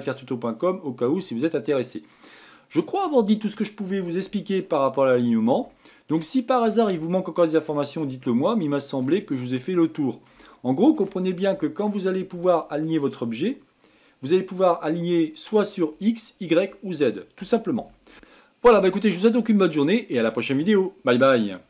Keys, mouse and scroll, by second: 0.0-5.9 middle drag, 5.9-6.3 scroll down 2, 6.3-14.3 shift+middle drag.